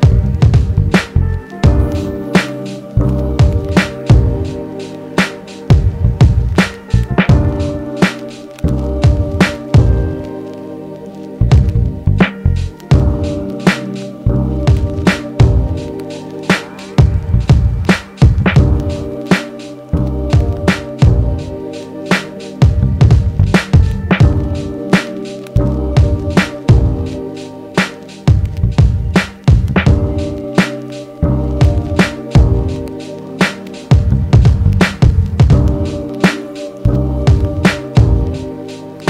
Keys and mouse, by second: 0.3-0.7 drag, 0.8 Tab, 1.8-3.8 ctrl+middle drag, 2.0 ctrl+Tab, 3.8-16.9 drag, 8.4 f, 16.7 ctrl+z, 17.5 ctrl+z, 28.6-39.0 drag.